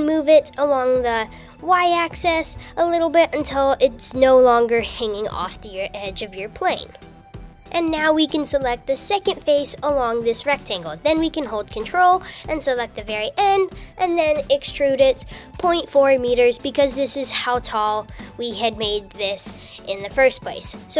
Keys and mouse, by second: 7.9 Tab, 10.6 ctrl+click, 14.4 e.